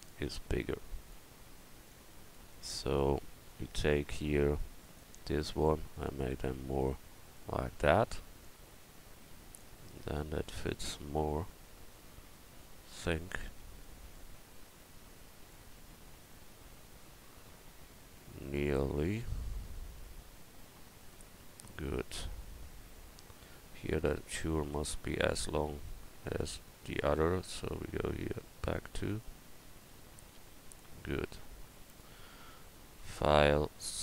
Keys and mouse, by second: 2.8 middle click, 4.2 Tab, 7.7 Tab, 11.0 a, 24.5 right click, 24.7 Tab, 27.5 middle click, 29.5 Tab, 30.5 a.